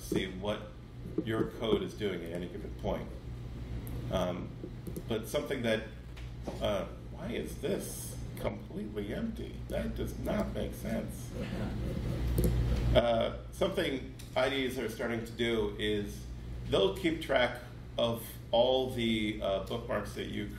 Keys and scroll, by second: 19.8 super+8.